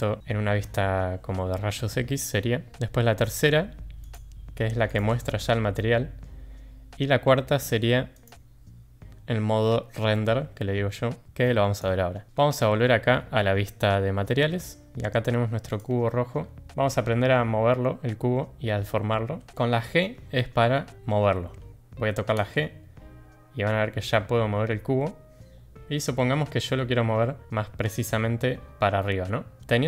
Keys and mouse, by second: 5.2-6.2 drag, 5.2-6.2 middle drag, 8.4 click, 11.7 click, 12.3 shift+middle click, 15.6 click, 16.6 middle click, 22.3 g.